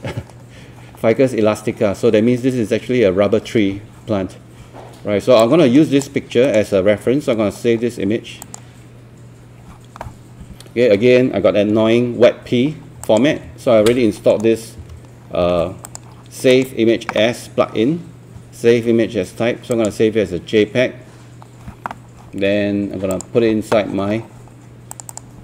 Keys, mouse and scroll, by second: 5.4 click, 6.5 right click, 8.4 click, 11.9 ctrl+1, 12.7 scroll up 1, 13.0 click, 13.9 scroll up 1, 14.3 right click, 14.8 Escape, 15.9 click, 16.5 right click, 19.7 click, 23.9 scroll down 1, 24.9 click.